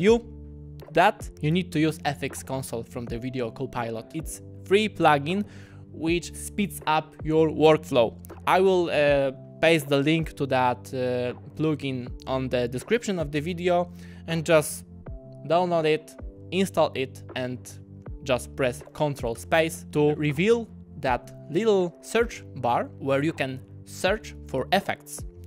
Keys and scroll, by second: 19.4 ctrl+space.